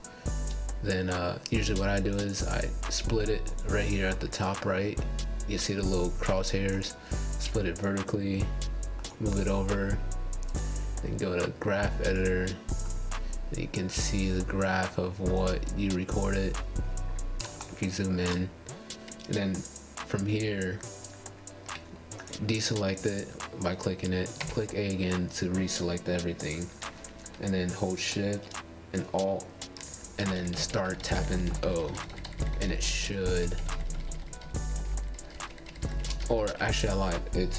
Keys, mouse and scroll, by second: 2.8-4.7 right drag, 6.4-10.4 drag, 13.0-13.6 scroll down 7, 13.8-15.8 scroll up 8, 15.9 click, 16.4 a, 22.8 click, 24.1 a, 29.6 alt+shift+o, 34.9 alt+o.